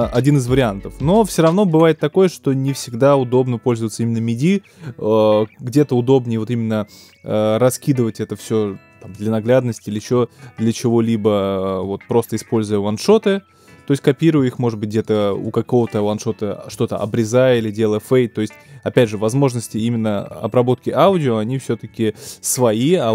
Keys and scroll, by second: 16.7 BackSpace, 17.5 ctrl+BackSpace.